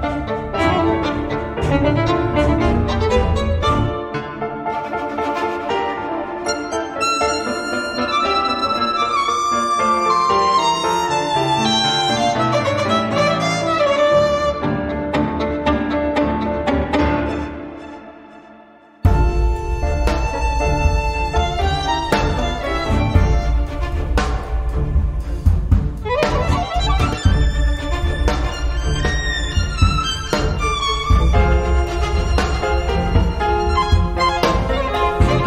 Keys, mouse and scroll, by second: 0.0-0.4 scroll down 1, 1.1 click, 2.4-4.5 drag, 4.5-5.6 scroll down 1, 5.9-7.2 drag, 7.3-8.5 drag, 8.8 click, 9.2 click, 10.0 click, 11.6 ctrl+click, 12.4 ctrl+click, 14.3 click, 15.5-18.1 drag, 18.0 0, 18.6 Return, 20.4 click, 21.5 space, 22.0 click, 22.6 space, 23.0 click, 23.5 space, 23.9 click, 24.6 space, 25.1 click, 25.5 space, 26.3 click, 28.6 click, 29.0 space, 29.3 click, 30.0 click, 32.3 click, 33.0 click, 34.6 click, 35.3 click.